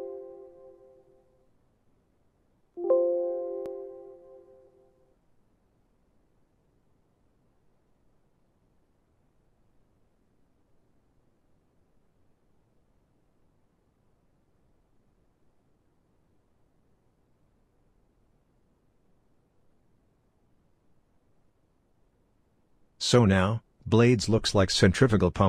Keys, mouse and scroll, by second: 3.1 right click, 19.9 middle click.